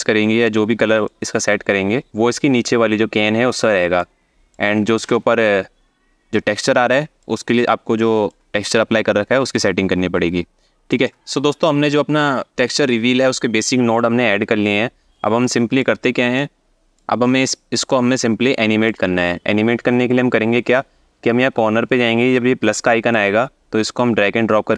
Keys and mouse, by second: 3.6-4.2 alt+shift+middle drag, 4.7 shift+click, 7.7 alt+shift+middle click, 10.6 alt+shift+middle click, 15.1 alt+shift+middle click, 16.0 click, 17.2-18.5 drag, 22.9-24.3 drag.